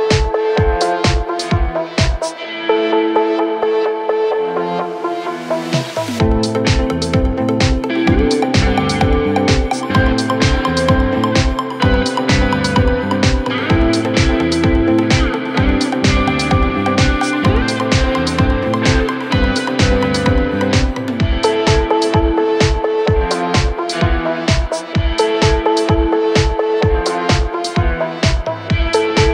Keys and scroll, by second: 10.7 Delete.